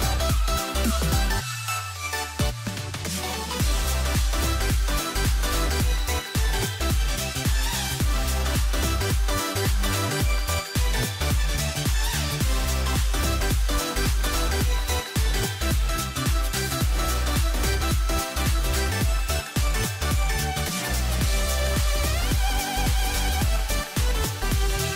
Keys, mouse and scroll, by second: 7.3 s, 14.5 click, 18.5 c.